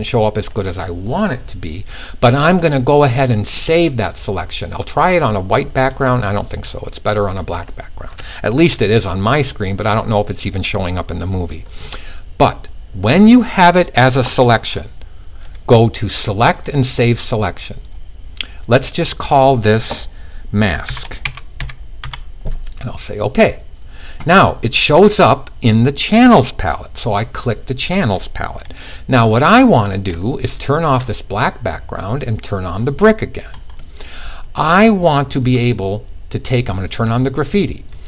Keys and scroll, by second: 20.4-21.5 typing.